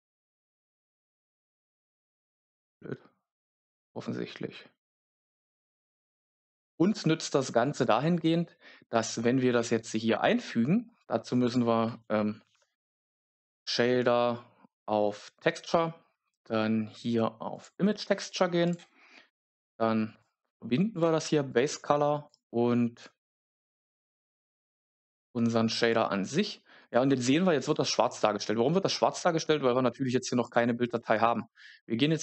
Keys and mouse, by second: 0.6 click, 1.2-5.9 drag, 11.4 click, 12.3 shift+a, 22.9 click, 24.2 click, 24.3 click, 25.8 click, 30.4-32.2 drag.